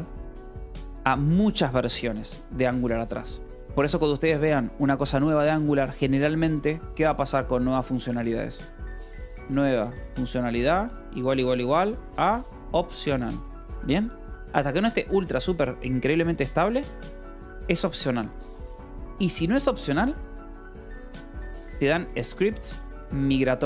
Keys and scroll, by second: 0.0-0.1 typing, 0.8 Escape, 6.9-13.2 typing, 13.3 Escape, 15.3 ctrl+s, 20.6-23.6 typing.